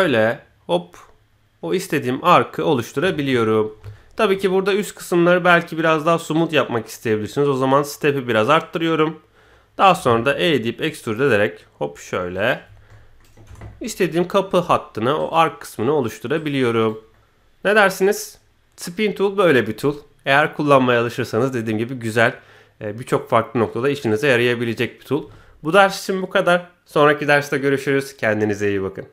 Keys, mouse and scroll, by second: 3.7 scroll down 1, 3.9-4.2 shift+middle drag, 6.3-8.3 drag, 12.6 scroll down 1, 12.9 middle click, 13.4 Tab, 13.7-15.0 middle drag, 15.1 right click, 16.5 right click, 17.1-18.9 middle drag.